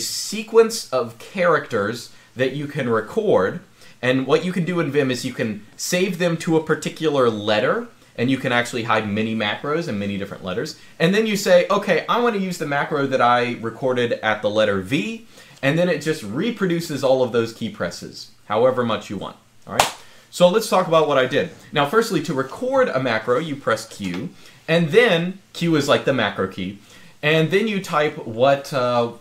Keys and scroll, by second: 23.8 q.